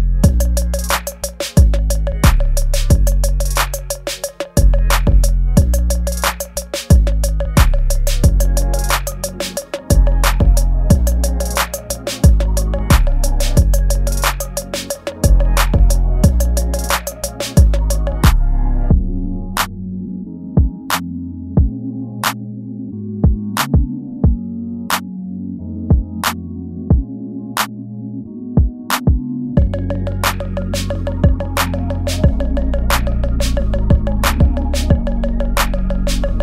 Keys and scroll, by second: 2.1 space, 2.9 ctrl+s, 5.5 space, 6.3 space, 7.2 ctrl+z, 7.9 ctrl+z, 11.3 space, 11.9 ctrl+z, 12.7 ctrl+z, 13.3 ctrl+z, 13.7 ctrl+z, 15.1 ctrl+z, 16.1 space, 16.8 ctrl+z, 20.2 space, 21.1 space, 21.5 ctrl+s, 25.7 ctrl+z, 26.3 ctrl+z, 26.7-31.9 typing, 28.3 ctrl+z, 31.7 ctrl+z, 33.2 ctrl+z, 33.7 space, 34.5 space, 34.7 ctrl+z, 35.6 space.